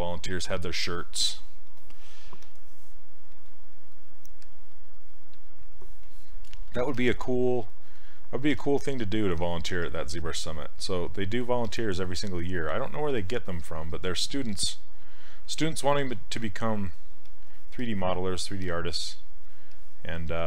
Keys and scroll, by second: 8.6 s, 9.9 s.